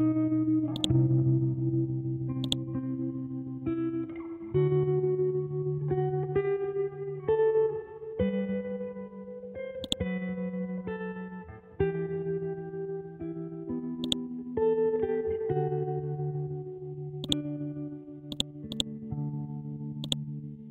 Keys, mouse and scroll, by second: 0.7-4.0 drag, 4.0-4.3 scroll up 1, 4.9 ctrl+Home, 6.4 scroll down 1, 7.1-8.1 scroll up 1, 9.8 click, 12.0 scroll down 1, 12.7-13.4 scroll up 1, 14.0 click, 14.9 Down, 15.9 Left, 17.0 Down, 17.2-20.7 drag.